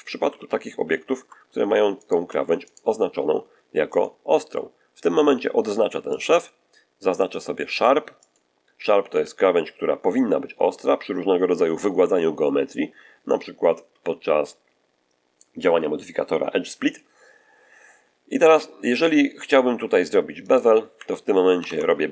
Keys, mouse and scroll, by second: 0.2 ctrl+z, 0.7 ctrl+z, 1.9 ctrl+shift+right click, 2.5 shift+right click, 3.8 click, 6.0 click, 7.1 click, 8.1 click, 9.0 a, 20.3 right click, 21.5 ctrl+b.